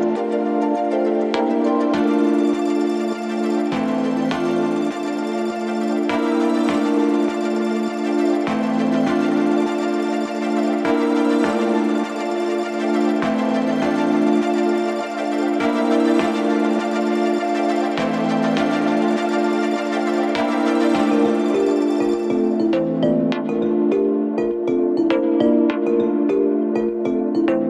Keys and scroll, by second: 1.4 4, 6.5 ctrl+d, 7.5 F1, 10.0 3, 11.2 ctrl+z, 15.2 4, 19.1 3, 23.1 ], 26.3 4.